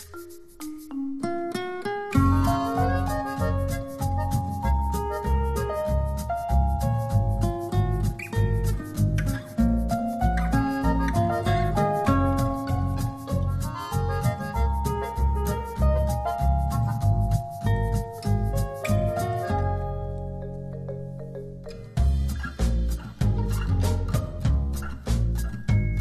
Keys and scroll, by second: 0.1 shift+Left, 1.3 shift+Left, 4.4 shift+Down, 18.7 shift+Right, 19.1 shift+Down, 20.2 shift+Right, 21.8 shift+Left, 22.5 Up, 23.4 Right.